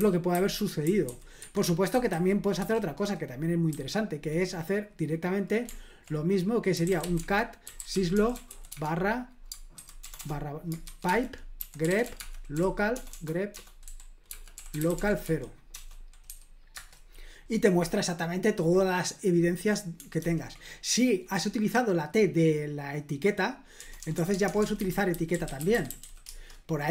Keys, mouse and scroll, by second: 0.0-2.6 typing, 1.4 Escape, 3.7 typing, 6.5-16.3 typing, 16.7 Return, 20.2 ctrl+p, 23.8-26.5 typing.